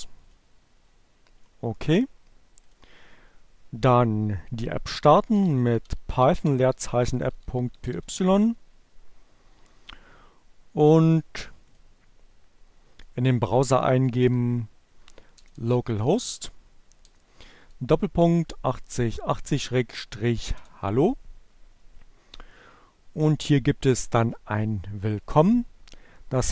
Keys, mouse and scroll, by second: 1.7 click, 4.2-7.7 typing, 10.0-11.5 drag, 12.4 click, 12.7 l, 13.0 o, 14.7 BackSpace, 16.6 BackSpace, 19.7 Return, 24.8 click.